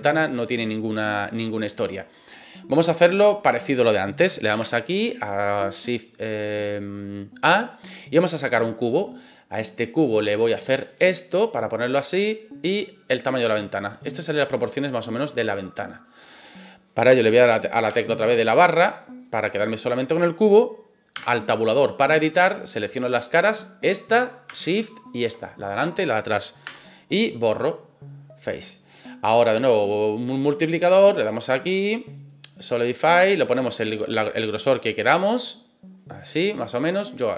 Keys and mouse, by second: 4.5 shift+a, 10.0 click, 10.8-11.9 drag, 12.7-14.1 drag, 14.4 middle click, 15.5 click, 17.9 KP_Divide, 19.2-20.3 middle drag, 21.1 Tab, 22.7 click, 23.5 right click, 23.9 middle click, 25.1 shift+right click, 25.4 middle click, 26.6 Delete, 31.2-32.6 drag, 33.6-36.0 drag, 36.2-37.3 middle drag.